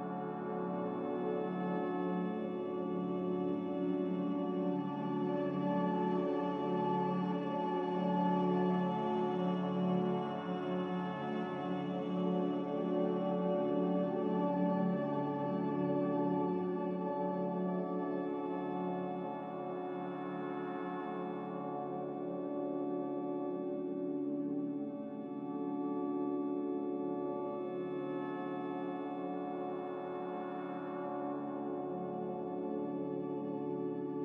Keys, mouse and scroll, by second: 9.0 b, 13.3 x, 15.7-16.8 typing, 16.8 Return, 19.4 z, 24.1 a, 26.8 Escape, 28.8 z, 31.7 b.